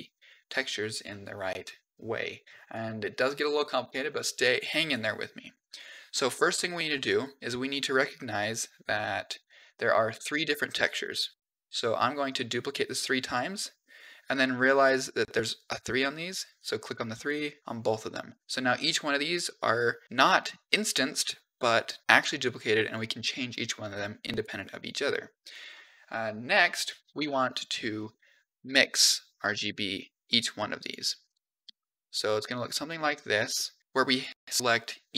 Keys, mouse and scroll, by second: 4.7 click, 9.2 click, 10.2 shift+d, 11.2 shift+d, 12.5 middle click, 13.1-13.4 scroll up 2, 13.4 middle click, 16.4 click, 17.1 click, 22.0 click, 23.3-26.5 drag, 26.6 click, 27.0 shift+a, 31.5 shift+d, 32.6 click, 33.9 click.